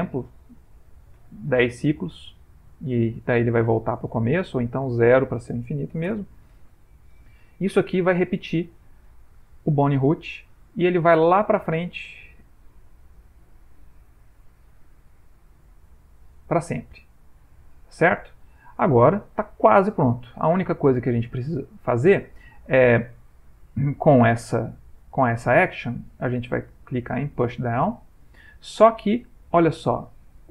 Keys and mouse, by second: 9.4 ctrl+space, 9.4 click, 10.4-10.8 ctrl+middle click, 12.3 click, 13.6 ctrl+middle click, 14.9 click, 18.3 ctrl+middle click, 24.7 middle click, 25.4 ctrl+Tab, 27.5 click, 28.7 middle click, 30.0 click, 30.0 middle click.